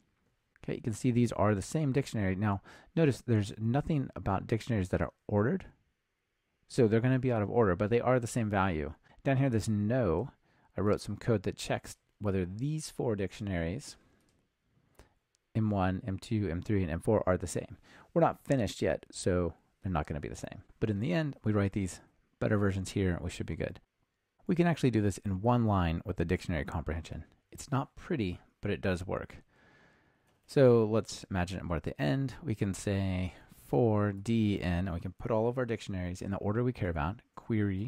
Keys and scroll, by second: 37.4 Return.